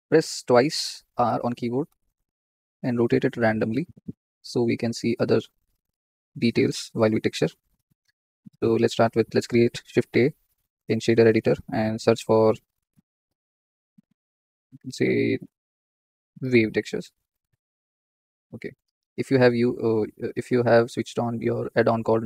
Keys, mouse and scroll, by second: 1.2 r, 5.1 click, 5.3-5.6 scroll up 6, 6.0 scroll down 2.